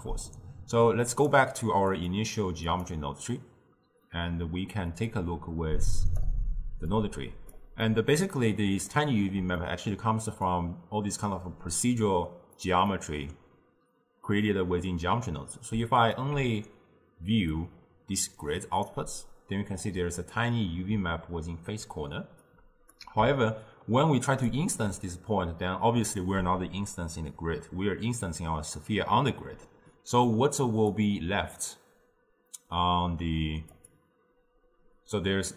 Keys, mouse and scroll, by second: 1.2 click, 2.0 click, 2.7 click, 5.1-7.9 drag, 7.9-10.6 middle drag, 10.6 click, 12.9-16.1 middle drag, 16.1 alt+shift+click, 17.6-20.6 drag, 22.5-24.5 drag, 31.0-33.9 drag.